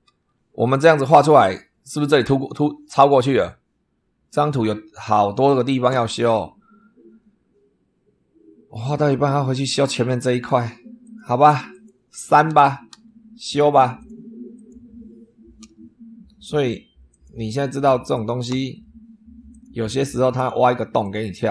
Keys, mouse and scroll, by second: 0.4-1.4 super+middle drag, 10.9 click, 11.6 click, 12.8 Delete, 13.9 click, 14.4 click, 15.5 Delete, 17.0 click, 18.0 click, 18.6 Delete, 19.4 click, 20.2 click, 20.9 click.